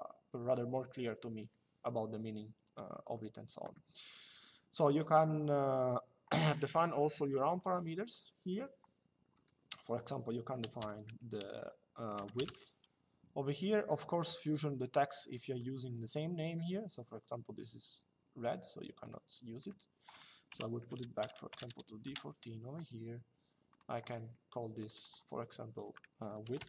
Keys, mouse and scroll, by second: 6.1 click, 7.3 click, 13.9 click, 18.7 click, 20.2 d, 21.2 BackSpace, 21.3 shift+4, 21.7 KP_Enter, 23.4 click, 24.5 click.